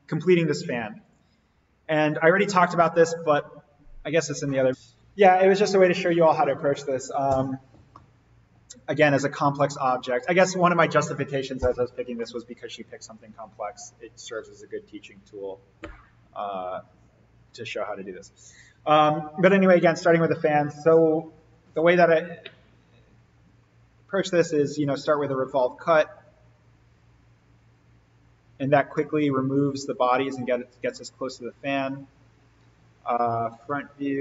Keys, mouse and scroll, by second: 1.1 click, 4.8 click, 7.8-12.2 middle drag, 22.6 click, 25.2 click, 28.9-31.0 middle drag, 32.3 click, 33.2 alt+s.